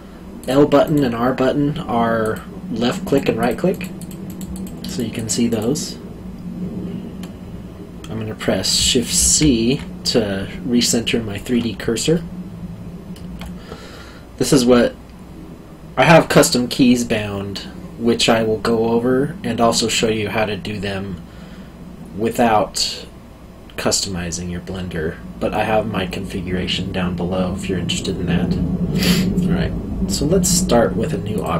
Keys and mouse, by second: 0.4 click, 0.8 right click, 2.2 click, 3.0 right click, 3.4 click, 3.7 right click, 4.0 click, 4.2 right click, 4.5 click, 4.8 right click, 5.1 click, 5.5 right click, 9.1 shift+c, 12.1 alt+middle click, 31.3 click.